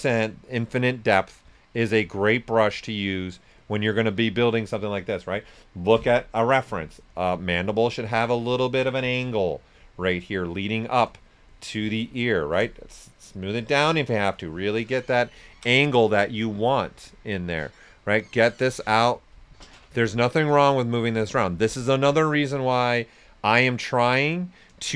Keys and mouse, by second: 0.2 click, 2.5 s, 2.6 click, 7.7 click, 9.1 s, 9.2-15.4 drag, 16.3 s, 16.4-18.2 drag, 17.7 typing, 20.1 right click, 20.9-24.0 drag, 24.6 right click.